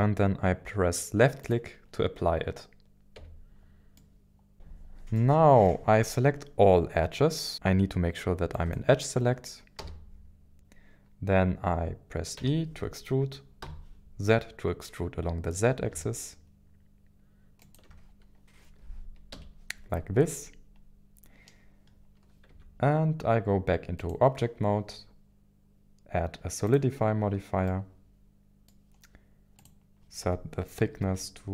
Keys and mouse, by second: 1.4 click, 3.2 Tab, 4.0-4.5 middle drag, 4.5 KP_1, 4.5 KP_7, 5.2 middle click, 8.5 click, 9.8 a, 12.4 e, 13.6 z, 17.6 ctrl+click, 19.3 KP_1, 22.5 Tab, 26.7 click, 27.7-28.8 middle drag, 29.7-31.5 drag.